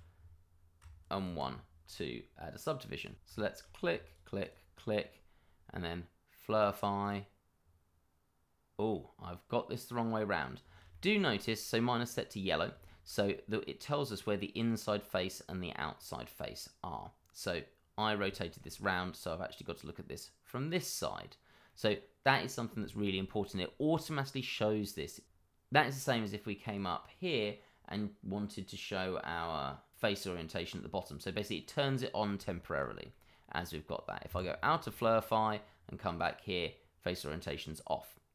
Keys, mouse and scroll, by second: 1.2 ctrl+1, 1.8-2.6 scroll down 1, 2.9 click, 3.3 shift+middle click, 3.4 middle click, 3.6-4.0 scroll up 1, 4.0 shift+click, 4.5 shift+double click, 4.7 shift+middle click, 4.9 middle click, 6.5 click, 7.1 double click, 8.9 middle click, 10.6 scroll down 1, 10.9 shift+middle click, 11.4 middle click, 15.9 middle click, 21.6 middle click, 22.8 shift+middle click, 22.8 middle click, 23.0 shift+middle click, 25.2 click, 31.6 middle click, 32.6 shift+middle click, 33.1 middle click, 34.2 Escape, 34.8 click.